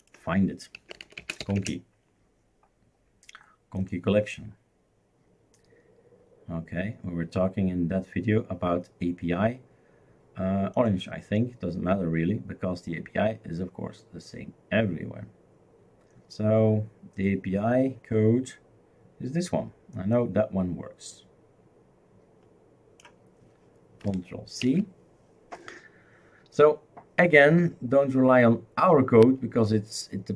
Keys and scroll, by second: 0.6-1.9 typing, 24.6 ctrl+c.